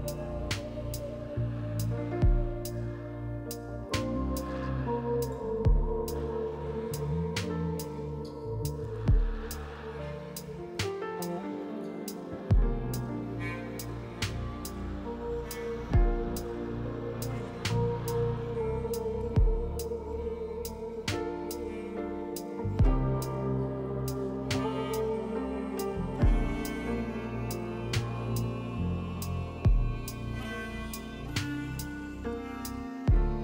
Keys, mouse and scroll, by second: 9.6 F4, 21.3 ctrl+z, 25.9 F4, 28.6 F4, 32.1 2.